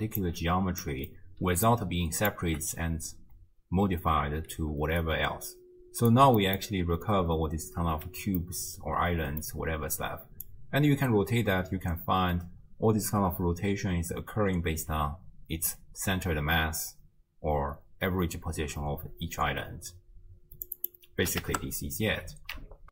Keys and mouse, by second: 0.2 d, 0.9 d, 0.9 middle click, 1.4-2.5 d, 1.7 click, 4.6 d, 5.0-6.1 drag, 6.1 d, 6.4 d, 6.5 middle click, 8.5-9.5 middle drag, 10.5-21.5 drag.